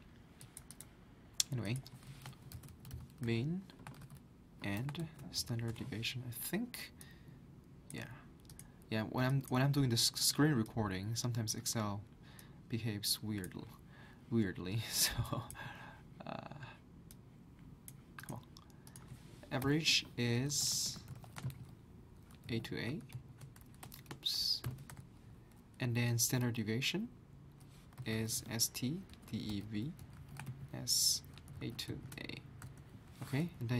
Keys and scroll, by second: 2.3-5.7 typing, 5.7 Return, 7.0-7.8 typing, 19.6-25.1 typing, 27.7-33.1 typing.